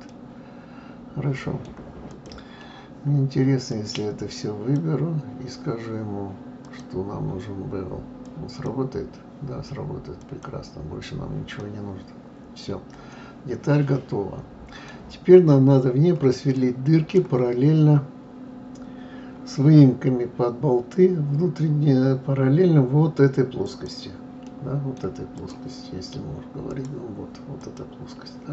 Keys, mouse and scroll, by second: 0.1-2.1 middle drag, 2.1 click, 3.7 click, 6.6-9.7 drag, 10.2 click, 11.6-14.7 middle drag, 16.5 middle click, 23.6 click, 24.4 middle click, 25.4 click, 26.7 click, 27.6 click.